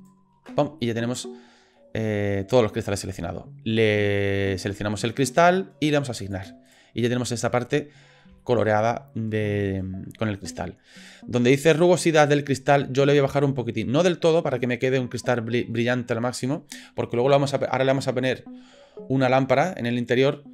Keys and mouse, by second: 0.8-3.0 middle drag, 6.2 click, 6.7 click, 7.4 middle click, 8.4 shift+click, 8.8 middle click, 13.1-15.3 drag.